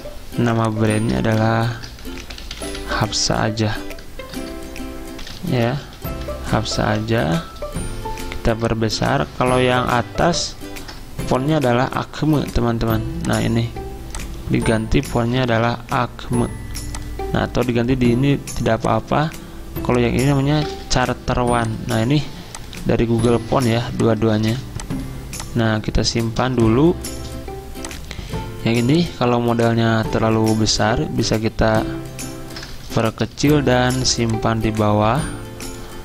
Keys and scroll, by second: 0.4 t, 1.0 ctrl+a, 1.8-6.4 typing, 6.9 Escape, 11.4-12.8 typing, 15.4 typing, 18.8 typing, 20.3-21.5 typing, 22.8-24.4 typing, 26.4-28.3 typing, 32.8-34.5 typing.